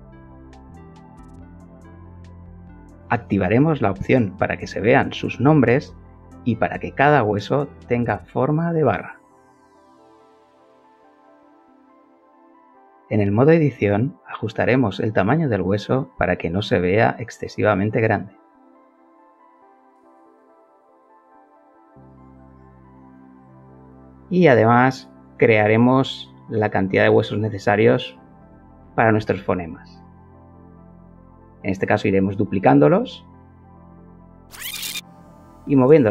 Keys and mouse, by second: 2.7 click, 3.5 click, 5.0 click, 7.2 click, 7.8 click, 9.0 click, 11.1 g, 11.4 x, 14.7 KP_1, 15.8 Return, 17.6 Tab, 18.7 click, 19.6 g, 19.9 z, 21.4 KP_0, 22.4 KP_Subtract, 22.9 Return, 24.0 click, 25.1-28.3 shift+middle drag, 27.5 shift+d, 28.4 d, 29.3 g, 29.7 z, 32.2 KP_0, 32.9 KP_Subtract, 33.4 Return, 34.5 Escape, 34.5-36.1 typing, 34.6 KP_Subtract, 34.7 Return, 34.7 shift+middle click, 34.9 Escape, 35.1 KP_Subtract, 35.1 Return, 35.3 KP_Subtract, 35.5 Escape, 35.6 KP_Subtract, 35.7 shift+middle click, 35.9 Escape, 36.0 KP_Subtract.